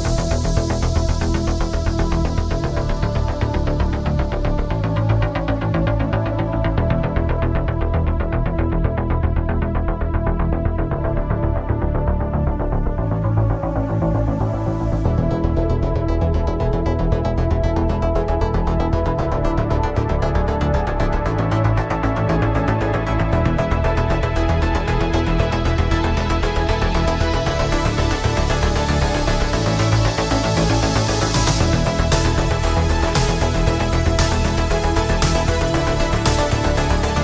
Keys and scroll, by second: 1.0 ctrl+z, 7.8 ctrl+z, 18.9 ctrl+z, 20.8 ctrl+z.